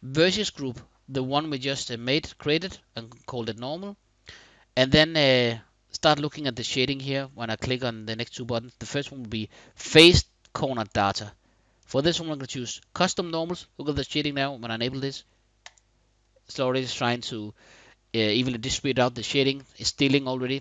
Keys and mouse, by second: 10.5 click, 11.4 click, 15.3 click.